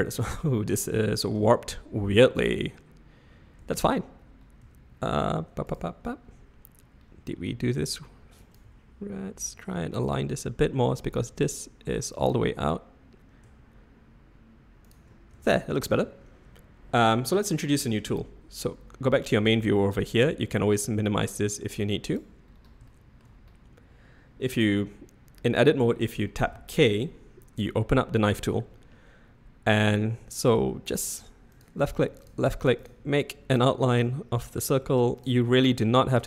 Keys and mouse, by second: 1.4 Tab, 3.6 Tab, 4.6 Tab, 5.3 Tab, 5.7 click, 8.4 click, 8.6 g, 10.9 drag, 12.2 click, 12.4 g, 15.3 Tab, 15.9 Tab, 21.4 click, 23.0 shift+drag, 26.4 k.